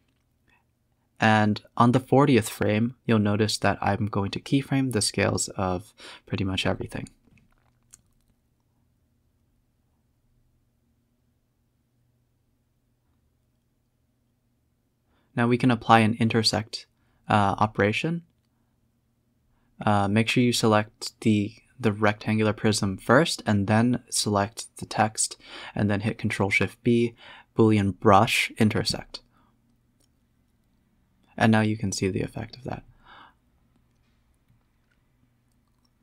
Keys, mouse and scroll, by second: 5.2 click, 7.6 click, 8.9 click, 9.5 shift+click, 13.6 ctrl+shift+click, 14.1 shift+click, 14.5 ctrl+shift+b, 15.7 z, 16.4 z, 16.7 scroll up 5, 16.9 a, 17.0 a, 17.5 ctrl+z, 17.7 ctrl+z, 18.0 ctrl+z, 18.2 scroll down 3, 18.6 z, 19.1 shift+click, 19.3 shift+click, 20.1 ctrl+shift+b, 22.1 middle click, 22.2 z, 22.8-23.2 scroll up 1, 23.2 scroll down 2, 23.3 scroll up 1, 23.8 click, 24.1 click, 24.6 s, 29.5 scroll down 1, 29.7 click, 30.4 click, 34.3-36.0 drag.